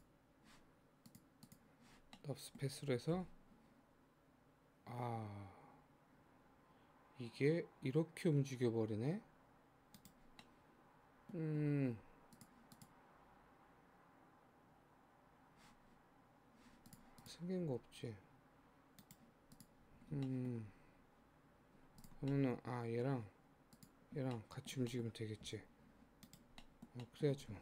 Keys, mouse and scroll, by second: 1.1 click, 1.5 click, 2.2 middle click, 3.2 g, 10.3 scroll down 1, 10.4-12.3 middle drag, 12.3 click, 12.8 click, 16.1-16.9 scroll down 2, 16.9 click, 17.2 click, 17.6 g, 19.5 click, 20.0-20.3 scroll up 1, 20.3 shift+middle click, 20.8-22.0 scroll up 2, 22.0 click, 22.3-23.7 middle drag, 23.7 shift+click, 24.4 middle click, 25.1-25.5 scroll down 1, 25.5 g, 26.7 middle click, 26.9 scroll down 1, 27.1 middle click.